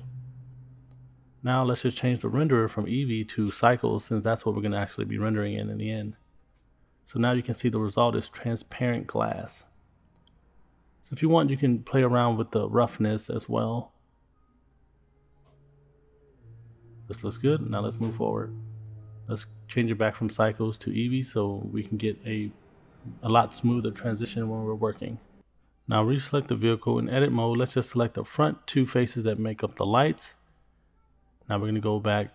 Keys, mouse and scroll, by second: 1.8 click, 3.4-5.9 drag, 7.3 click, 7.8 scroll down 2, 8.4 middle click, 20.8-22.1 drag, 24.3-25.9 drag, 26.3 middle click, 27.0 middle click, 27.9 click, 28.9 middle click, 30.0 shift+click, 30.5 middle click.